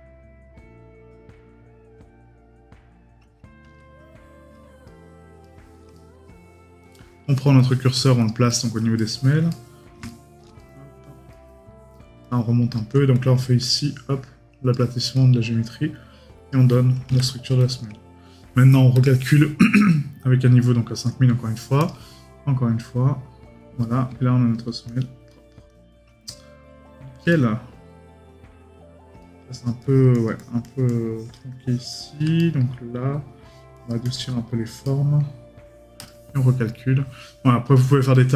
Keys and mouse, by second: 4.8 right click, 8.5 right click, 26.3 right click, 29.2 right click, 32.4 right click, 34.8 right click, 38.1 right click.